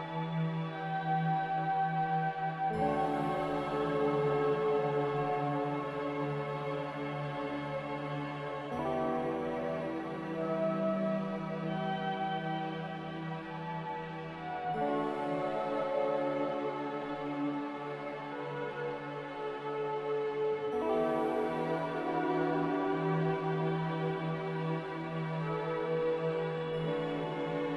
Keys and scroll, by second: 1.0 Delete, 6.1 x, 6.8 z, 8.0-8.5 typing, 8.7 Return, 10.2-12.2 typing, 16.4 z, 19.7 a, 21.5 ctrl+c, 22.0 ctrl+z, 22.4 ctrl+z.